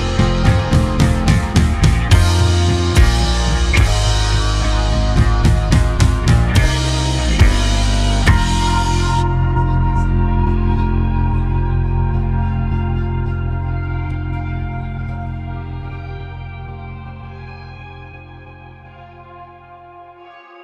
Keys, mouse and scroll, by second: 8.8 shift+a, 13.3 a, 15.0 ctrl+z, 15.8 s, 19.6-20.2 scroll down 4, 20.2-20.6 middle drag.